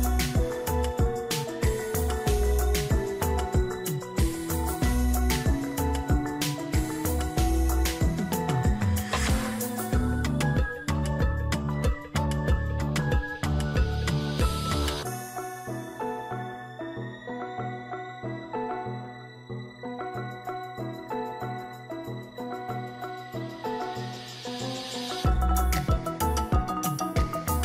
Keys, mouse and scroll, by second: 0.9 double click, 10.5 ctrl+-, 10.9 ctrl+-, 11.1 ctrl+t, 13.1 alt+click, 16.5 alt+click, 17.4 alt+click, 20.6 ctrl+=, 21.0 ctrl+=, 25.0 alt+click.